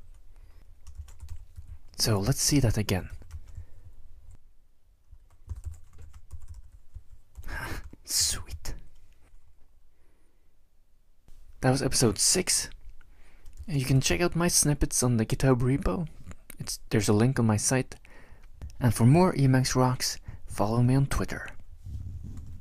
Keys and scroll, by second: 1.0-3.5 typing, 5.3-8.9 typing, 13.6 ctrl+x, 13.7-14.6 typing.